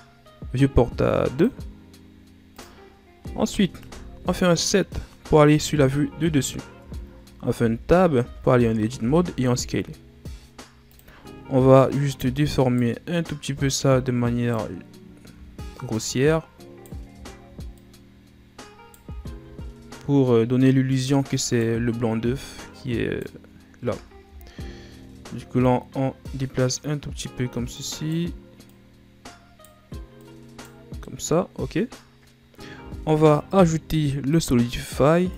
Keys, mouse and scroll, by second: 1.3-3.7 drag, 3.7 KP_7, 5.7-6.8 shift+scroll up 5, 6.8 Tab, 7.5 a, 8.1 a, 8.9 s, 11.2-11.9 scroll up 3, 11.9 right click, 13.2 right click, 15.4-15.9 shift+scroll down 1, 15.9 right click, 17.2-17.7 shift+scroll up 1, 17.7 right click, 19.2-20.4 shift+scroll down 4, 21.1 right click, 22.4 right click, 23.9-25.5 ctrl+scroll down 5, 25.5 right click, 27.1-27.7 scroll down 1, 27.7 right click, 28.6 right click, 30.1 right click, 31.0-32.2 middle drag, 32.2-32.7 scroll up 1, 32.7 Tab, 34.2-35.3 drag.